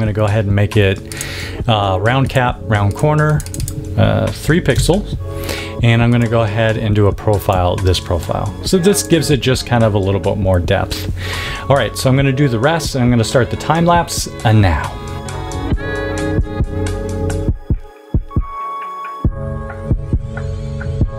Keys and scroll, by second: 4.4 3, 4.7 Tab, 15.2-21.1 typing, 15.9 super+z, 16.4 super+Tab, 16.6 super+Tab, 17.9 super+=.